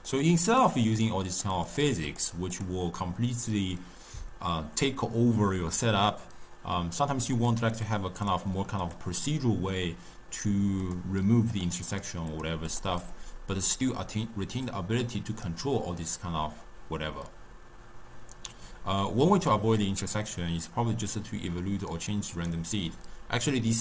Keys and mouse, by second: 0.2 click, 0.5 click, 0.9 click, 1.3 click, 1.7 click, 2.1 click, 2.6 click, 7.4 click, 7.8 click, 8.3 click, 8.9 click, 10.9 click, 11.6 click, 12.0 click, 12.4 click, 12.8 click, 13.1 click, 13.7-14.8 middle drag, 14.8-17.8 drag, 20.1-23.2 middle drag.